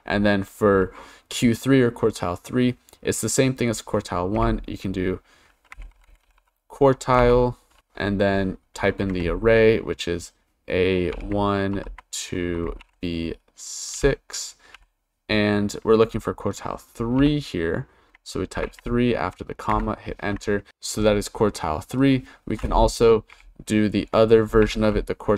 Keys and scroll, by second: 4.4 =, 5.5-7.2 typing, 9.0 shift+a, 11.1 1, 11.7 shift+;, 12.8 shift+b, 13.9 6, 14.7 ,, 17.2 3, 18.6 shift+0, 19.7 Return, 23.3 =, 24.4-25.3 typing.